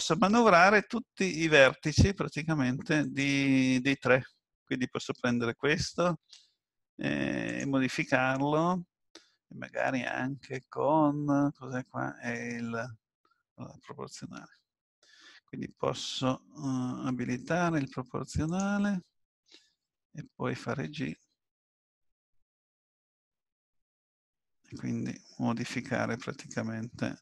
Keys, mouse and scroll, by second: 3.0 click, 6.2 g, 14.4 ctrl+z, 18.5 click, 20.9 g.